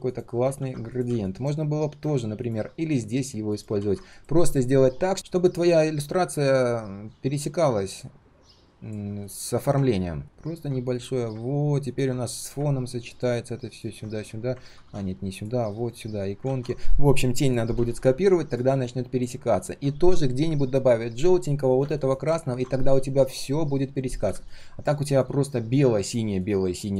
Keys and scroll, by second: 0.5 ctrl+c, 3.7 ctrl+v, 12.3 ctrl+alt+c, 14.1 ctrl+alt+v, 14.6 ctrl+z, 14.8 ctrl+z, 15.8 ctrl+alt+v, 16.4 ctrl+z.